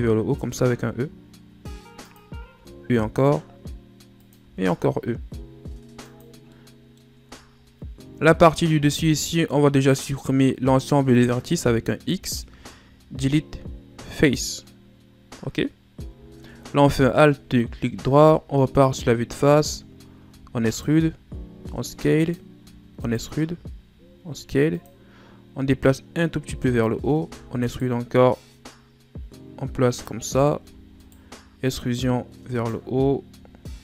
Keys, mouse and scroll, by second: 0.1 e, 2.2 e, 6.1 middle click, 6.9 shift+scroll down 3, 7.2-8.5 scroll up 2, 8.5-11.5 middle drag, 11.7 x, 16.7 alt+right click, 17.7 KP_1, 19.9 e, 20.8 s, 25.5-26.8 drag, 26.8 e, 28.0-30.2 drag, 30.2 e, 31.3-32.6 drag, 32.6-33.5 shift+scroll up 4, 33.5-33.8 drag.